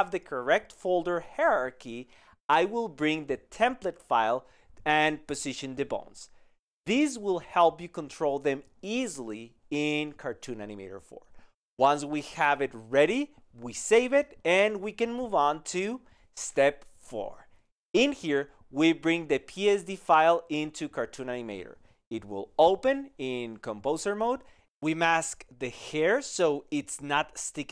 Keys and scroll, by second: 6.5 alt+[, 10.7 alt+j.